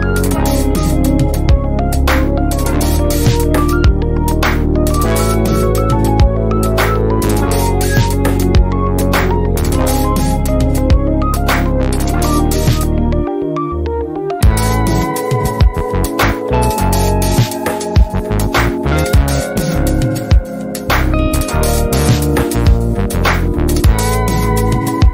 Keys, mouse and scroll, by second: 0.0-0.2 typing, 0.6 F1, 0.9 ctrl+scroll up 1, 1.3-2.3 drag, 2.8 ctrl+shift+c, 3.2 F2, 3.9 ctrl+alt+click, 4.4 ctrl+scroll up 1, 4.6 F1, 5.5-6.4 drag, 7.8 F1, 8.5-9.7 click, 9.6 F1, 10.6-11.2 drag, 12.1 shift+a, 13.2-14.5 ctrl+drag, 16.4 ctrl+alt+click, 16.8 F1, 17.6-18.8 drag, 21.4-24.0 drag, 24.0-24.9 drag.